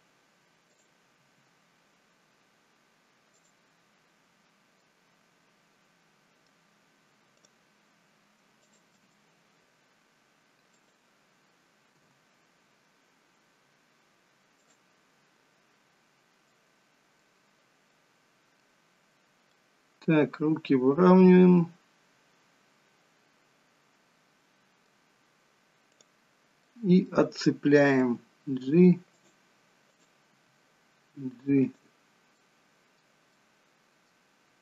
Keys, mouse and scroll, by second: 0.7 click, 1.2 r, 4.8 middle click, 7.4 click, 8.6 shift+click, 9.1 middle click, 9.6 r, 11.9 g, 16.6 middle click, 17.9 middle click, 19.6 middle click, 26.0 click, 26.7 middle click, 28.0 g, 29.9 click, 30.3 g, 32.4 middle click, 33.4 middle click.